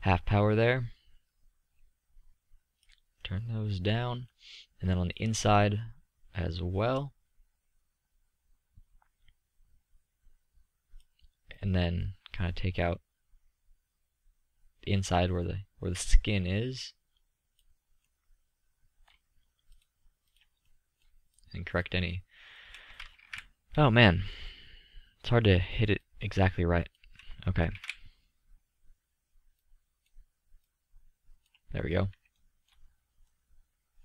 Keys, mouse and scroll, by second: 3.8-5.7 middle drag, 5.7-7.2 drag, 12.1-13.7 middle drag, 18.2-19.1 middle drag, 19.9-23.3 drag, 23.8 ctrl+z, 28.3 ctrl+z, 32.6-34.0 middle drag.